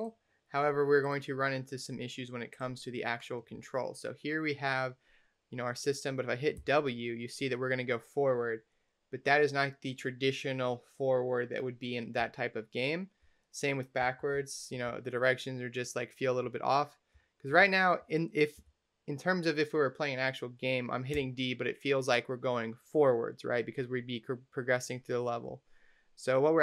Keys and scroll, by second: 6.4 w, 12.0 s, 13.9 s, 14.2 a, 14.7 d, 17.0 a, 17.5 w, 18.4 d, 20.9 d, 25.3 a.